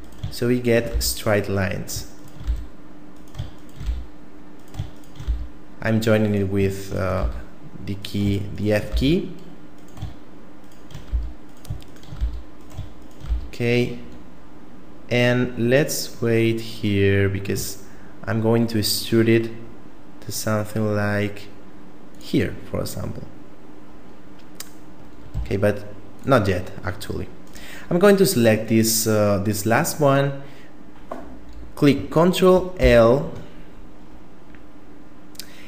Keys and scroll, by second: 0.9 f, 2.5 f, 3.9 f, 5.3 f, 7.2 f, 8.9 f, 11.1 f, 12.2 f, 13.3 f, 25.3 x, 32.8 ctrl+l.